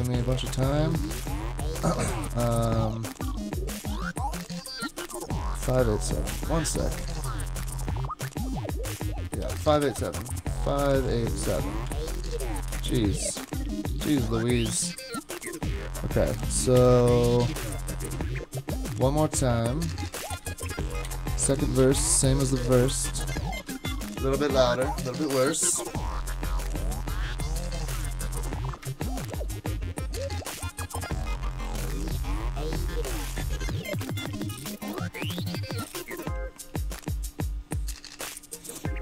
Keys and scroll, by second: 0.5 shift+super+Tab, 1.0 super+Tab, 6.3 alt+super+o, 21.1 Up, 21.8 Down, 22.0 Return, 23.6 super+k.